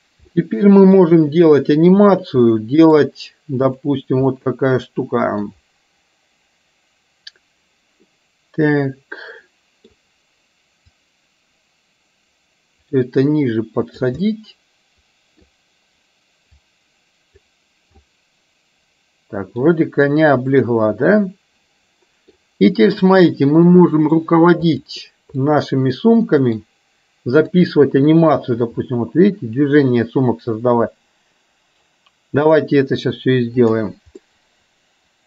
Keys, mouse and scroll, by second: 0.3-1.1 middle drag, 2.1 click, 2.6-3.1 middle drag, 3.7 click, 4.3-5.6 middle drag, 8.2-9.9 middle drag, 11.1-14.2 drag, 14.3-15.6 middle drag, 16.6-17.6 drag, 18.1-19.7 middle drag, 20.6-21.1 scroll up 1, 21.1-22.4 middle drag, 23.3-24.3 middle drag, 24.8 click, 25.6-26.7 middle drag, 29.5 r, 34.3-35.2 middle drag.